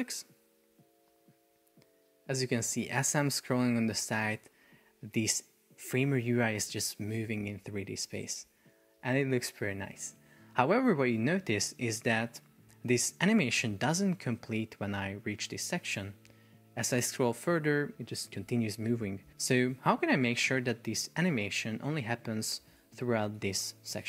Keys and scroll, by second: 10.3 Escape, 12.2 super+p, 19.5 Escape, 23.5 shift+super+4.